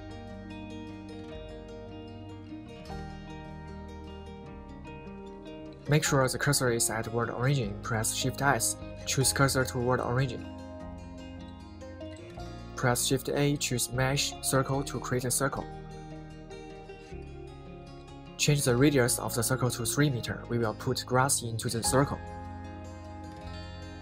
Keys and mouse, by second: 9.6 shift+s, 14.0 shift+a, 19.6-20.9 drag, 21.7-23.3 drag, 23.6-24.0 middle drag.